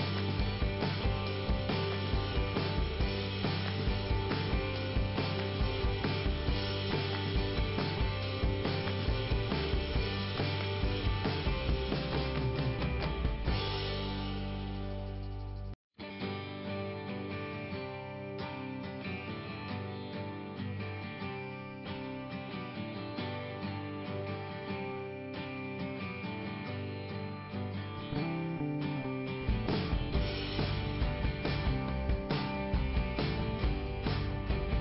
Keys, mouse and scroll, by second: 2.8 alt+i, 3.5 scroll up 2, 9.6 middle click, 12.8 alt+i, 13.6 scroll up 2, 15.7 i, 15.9 click, 17.2 click, 19.1 click, 20.0 click, 21.0 click, 22.7 middle click, 24.4 click, 26.6 click, 30.8-31.9 scroll down 1, 31.9 scroll down 1, 31.9 scroll up 1, 32.8 click.